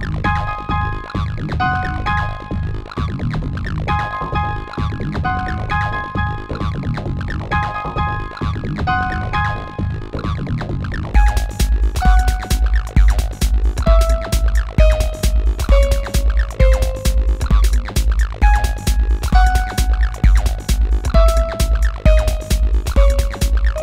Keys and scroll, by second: 17.8 BackSpace.